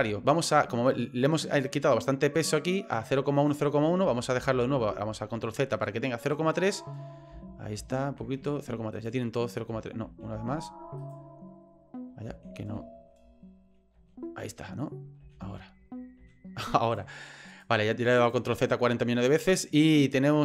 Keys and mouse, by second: 2.3 right click, 2.9 right click, 3.4 right click, 4.1 ctrl+z, 4.4 ctrl+z, 4.7 ctrl+z, 5.7 right click, 6.3 right click, 6.5 right click, 7.3 ctrl+z, 7.8 ctrl+z, 8.2 ctrl+z, 8.9 right click, 9.7 ctrl+z, 10.1 ctrl+z, 10.3 ctrl+z, 11.0 right click, 12.3 ctrl+z, 12.6 ctrl+z, 12.9 ctrl+z, 13.2 ctrl+z, 13.6 ctrl+z, 13.9 ctrl+z, 15.2 ctrl+z, 16.2 ctrl+z, 16.8 right click, 17.5 right click, 18.2 right click, 19.3 right click, 20.1 right click.